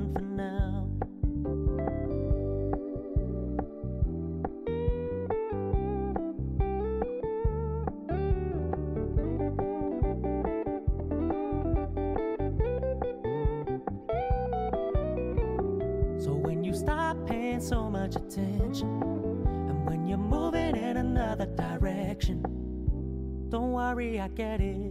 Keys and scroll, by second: 7.8 ctrl+Return, 13.9 ctrl+d.